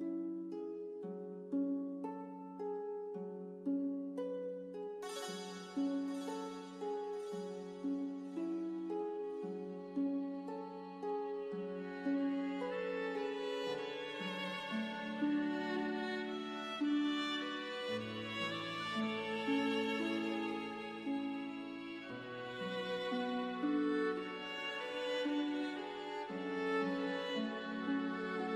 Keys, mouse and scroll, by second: 3.7 ctrl+Num_Lock, 6.8 scroll up 1, 9.4 w, 10.4 click, 16.0 c, 19.8 click, 23.1 click.